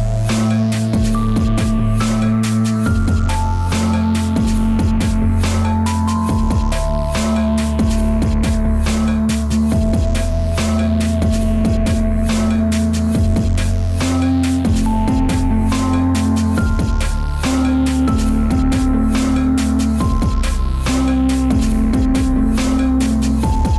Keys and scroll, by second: 0.3 space, 0.7 ctrl+z, 1.6 ctrl+z, 4.9 ctrl+z, 5.3 ctrl+z, 5.8 ctrl+z, 7.0 ctrl+z, 7.6 ctrl+z, 8.1 ctrl+z, 9.7 ctrl+=, 11.6 ctrl+-, 13.0 space, 13.6 space, 14.3 space, 14.8 ctrl+z, 15.2 ctrl+z, 15.7 space, 16.6 space, 18.6 ctrl+s, 22.8 space.